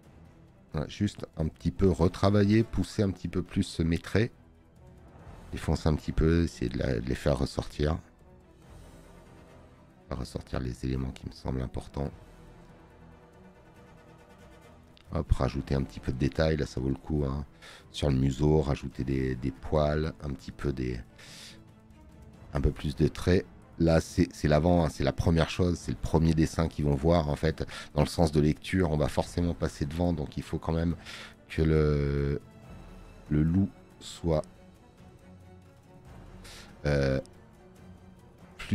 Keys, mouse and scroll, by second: 3.7 click, 3.7 space, 20.5 space, 20.7 click, 27.2 click, 30.7 space, 30.9 click.